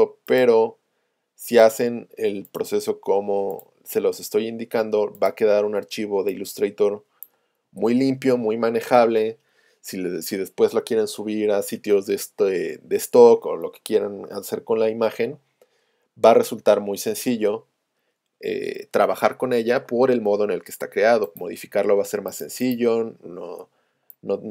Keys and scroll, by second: 23.9 space.